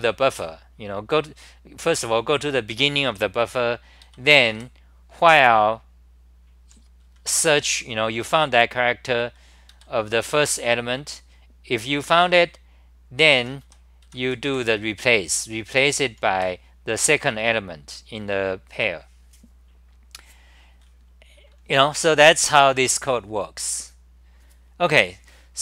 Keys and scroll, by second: 4.0 ctrl+g, 4.0-5.0 typing, 7.2 r, 9.5-10.9 typing, 13.2 ctrl+g, 13.3-15.0 typing, 15.7 ctrl+g, 16.1 n, 16.3 1.